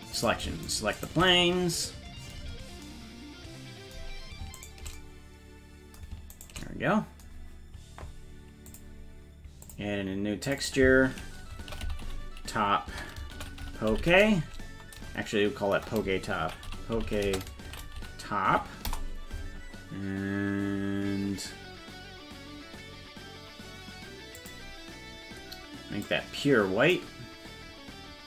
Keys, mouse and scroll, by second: 0.2 right click, 0.7 shift+right click, 1.0 shift+right click, 2.5-2.9 scroll up 3, 4.6 shift+right click, 6.4 shift+right click, 8.7 click, 9.7 click, 10.5 click, 10.6-19.5 drag, 24.4 click.